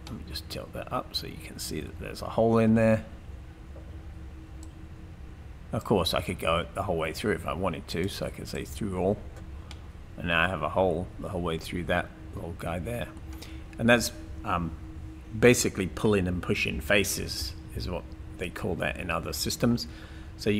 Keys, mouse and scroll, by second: 9.8 middle click, 11.1-13.2 middle drag.